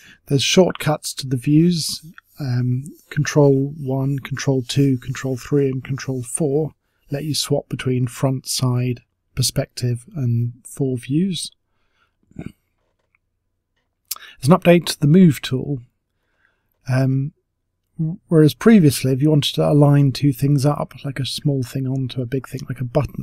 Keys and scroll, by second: 0.4 ctrl+1, 1.0 ctrl+2, 1.5 ctrl+3, 2.0 ctrl+4, 6.3 ctrl+3, 8.0 ctrl+1, 8.6 ctrl+2, 9.1 ctrl+3, 9.6 ctrl+4, 11.5 ctrl+1, 12.9 ctrl+3, 13.0-13.8 typing.